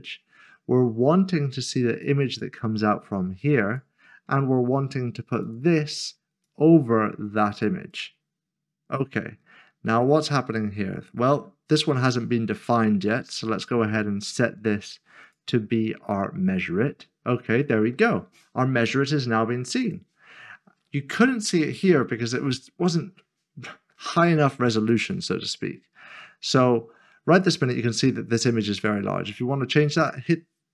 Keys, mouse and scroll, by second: 2.0 click, 9.2-12.4 scroll down 1, 12.4 scroll up 1, 13.4-15.2 scroll up 1, 15.2 click, 19.8 click, 22.9 click, 23.4-24.9 scroll down 1, 24.9 click, 25.4 middle click, 26.5-27.1 scroll down 1, 27.1 scroll up 1, 27.2-28.9 scroll down 1, 28.9-30.0 scroll up 1.